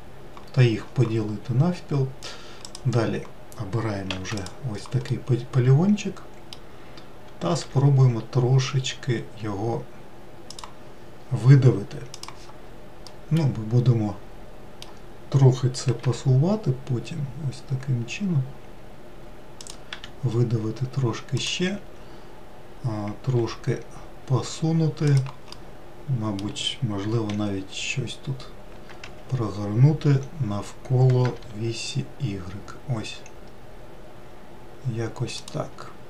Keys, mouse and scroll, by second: 2.1-2.9 scroll up 1, 2.9 click, 4.3 3, 4.6 click, 5.3-7.8 middle drag, 7.8 e, 13.4-16.3 middle drag, 16.3 g, 20.2 e, 23.7 g, 25.8-27.6 middle drag, 27.6 r.